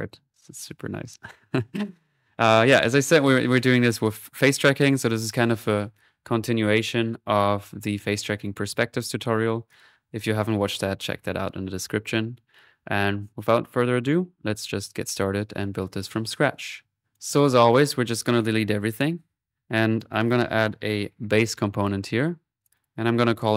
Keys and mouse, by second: 2.6 middle click, 3.1 click, 3.9 middle click, 4.5-5.9 drag, 9.7-11.3 drag, 17.2 click, 17.7-19.1 right drag, 17.7 typing, 19.5 Delete, 19.5 middle click, 19.8-21.2 drag, 21.0-22.7 typing, 21.8 click, 22.7 Escape, 22.7 click.